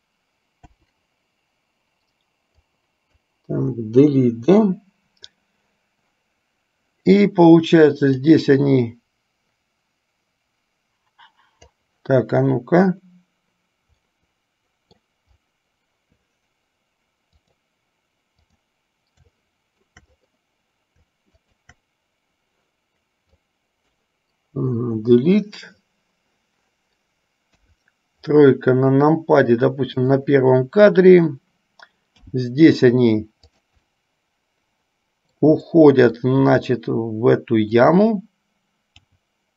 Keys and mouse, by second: 0.9 Delete, 2.8 click, 4.5 Delete, 8.4-11.9 drag, 14.2-15.2 middle drag, 17.4 click, 18.8 click, 19.5-20.2 shift+middle drag, 21.5 shift+click, 23.5-24.0 drag, 24.9 Delete, 27.9 KP_3, 30.2 click, 32.4 g, 34.2-35.5 middle drag, 35.9 middle click, 36.7 r, 39.2 g.